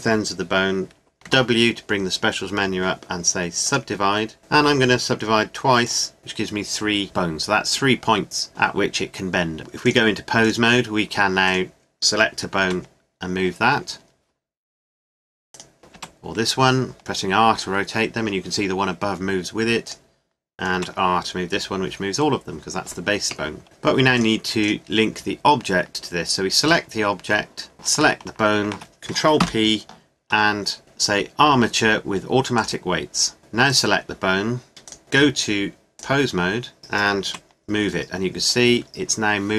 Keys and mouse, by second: 1.2 w, 5.8-7.0 drag, 9.8 click, 11.5-12.6 right drag, 12.6 r, 13.3-15.5 middle drag, 15.9 r, 19.8-21.6 right drag, 20.7 r, 24.2 click, 26.0 middle click, 26.6-29.7 right drag, 29.4 ctrl+p, 29.7-33.7 middle drag, 33.7-36.8 drag, 37.2 r.